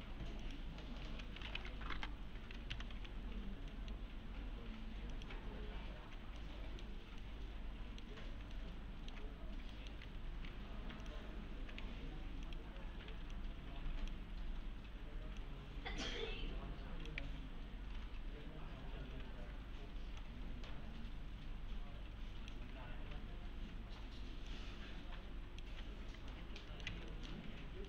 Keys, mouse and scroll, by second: 0.0-3.4 typing, 1.9 Return, 3.2-3.7 scroll down 1, 3.7 middle click, 4.0-5.1 scroll down 1, 6.4-7.0 middle click, 6.9 scroll down 1, 7.2-8.2 middle click, 8.6-9.2 alt+middle click, 9.5 scroll up 1, 9.5 scroll down 1, 9.7 middle click, 10.0 2, 10.3 scroll up 1, 10.5 2, 11.0 click, 11.8 2, 12.5 click, 13.1 1, 13.3-14.3 click, 14.3 click, 20.2-22.7 click, 25.8 1, 26.0 scroll down 1, 26.3-26.9 alt+middle click, 26.9 alt+x, 27.1 middle click, 27.5 scroll down 1.